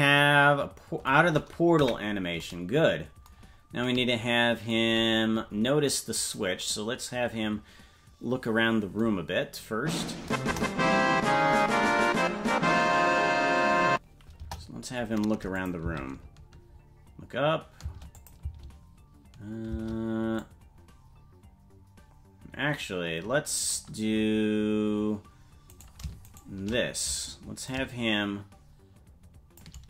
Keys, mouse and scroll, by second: 1.8 KP_Decimal, 3.3 scroll down 4, 5.9 click, 10.4 KP_0, 14.4 KP_0, 15.6 click, 15.8 space, 18.1 click, 18.1 space, 18.4 space, 19.8 space, 20.4-23.8 drag, 25.8 right click, 26.4 shift+right click, 27.6-29.7 drag.